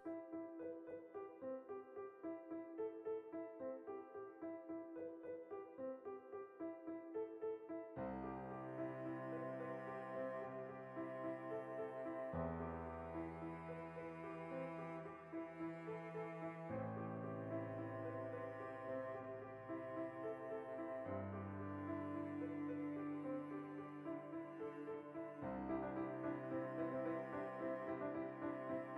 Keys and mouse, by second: 0.9 right click, 1.4 Tab, 1.6 right click, 1.9 KP_Decimal, 2.1-14.1 middle drag, 13.3 alt+q, 14.1-14.6 shift+right drag, 14.6 middle click, 14.6 \, 15.1 right click, 15.2 Tab, 15.4-17.4 shift+middle drag, 16.2 a, 17.4-18.4 drag, 18.4-24.3 shift+middle drag, 22.3 alt+q, 22.7 z, 23.6 ctrl+r, 24.3 right click, 24.9-26.6 typing, 27.3 click, 27.5-28.9 middle drag, 27.9 z.